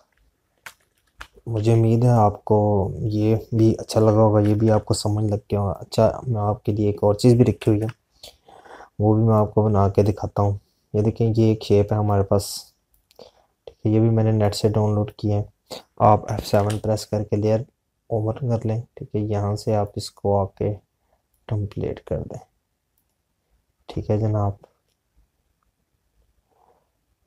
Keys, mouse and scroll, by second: 0.3 click, 2.5 z, 3.5 click, 6.7 click, 10.7 click, 11.5-13.5 scroll down 1, 13.5 click, 18.4 F7, 21.0 click.